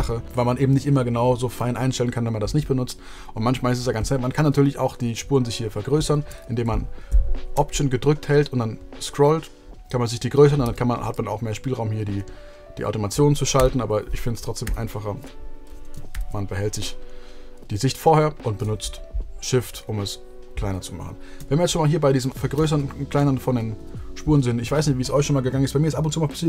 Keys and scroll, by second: 0.2 BackSpace, 10.6 a, 13.5 super+z, 16.1 shift+super+z, 22.5 a.